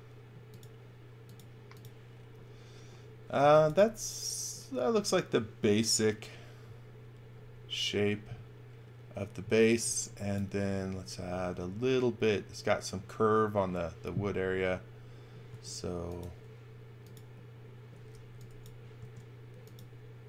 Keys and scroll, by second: 3.1-4.1 typing, 9.5 x, 9.8 v, 15.4 a, 18.1 e, 18.9 a.